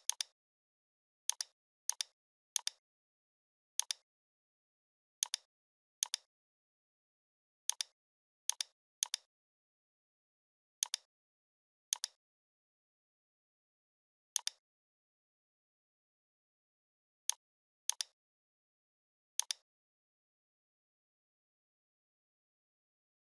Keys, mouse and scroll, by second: 0.0 space, 0.1-0.7 click, 0.4 space, 1.3 click, 1.6 scroll down 1, 1.9 space, 1.9-2.3 click, 2.2 space, 2.6-3.6 click, 3.7 space, 3.8-4.2 click, 4.0 space, 5.3-6.7 drag, 15.6-16.8 scroll down 1, 17.3 ctrl+z, 17.9 alt+click, 19.4 click, 20.9 ctrl+d.